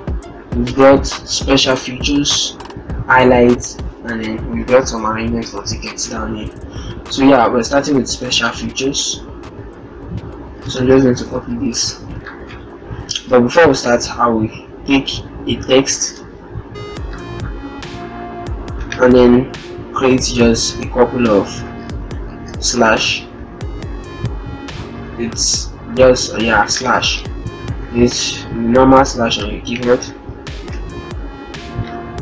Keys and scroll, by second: 11.0 ctrl+c, 11.0 ctrl+c, 11.2 ctrl+c, 26.7 ctrl+Return, 27.7 ctrl+a, 29.6 ctrl+d, 30.1 ctrl+t.